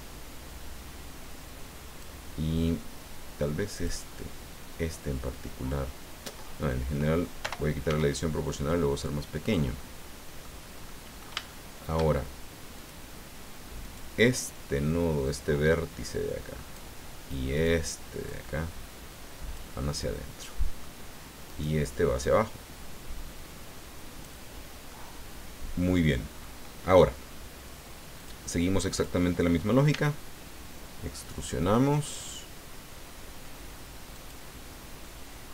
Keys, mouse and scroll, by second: 3.8 click, 7.4 o, 7.8 s, 9.4 click, 9.8 middle click, 10.8 middle click, 12.7 click, 13.8 right click, 15.3-16.9 drag, 17.5 right click, 18.2-19.7 drag, 19.9-21.0 middle drag, 21.4 right click, 22.2-24.4 drag, 24.9-26.6 middle drag, 28.2 click, 28.9 right click, 29.9 e, 34.1 click, 35.0-35.5 middle drag.